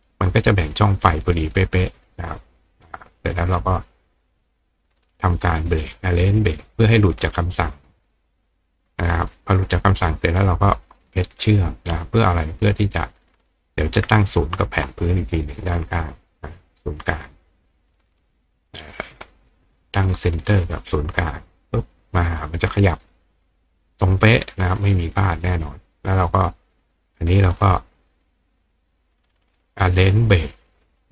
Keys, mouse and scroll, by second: 3.2 click, 4.3 click, 5.4 click, 6.7 click, 9.0 click, 9.7-10.7 drag, 12.7 click, 14.5 shift+click, 15.6 click, 17.0-18.1 drag, 20.8 click, 21.6 click, 22.7 click, 23.2 click, 24.7 click, 25.6 click, 30.0 click.